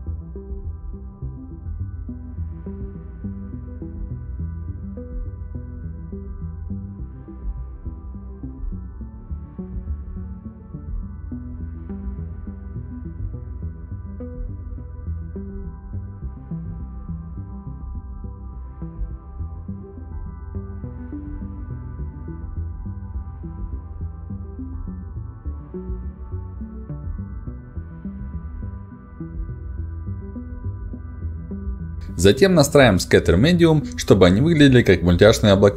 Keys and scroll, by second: 12.8 3, 16.6 f, 24.1 5.